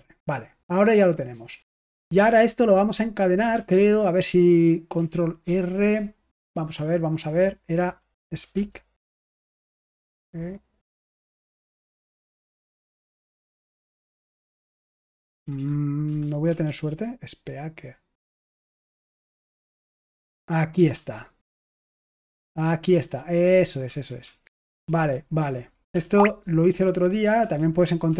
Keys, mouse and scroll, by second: 2.1 ctrl+p, 3.5 ctrl+c, 5.4 ctrl+r, 8.4 typing, 10.0 BackSpace, 11.4-13.0 typing, 15.1-18.4 typing, 20.7 Return, 23.8 ctrl+a, 24.6 ctrl+alt+f, 24.9 ctrl+alt+f, 26.1 alt+g, 27.2 alt+f, 27.5 alt+f, 27.8 alt+f, 28.0 alt+f.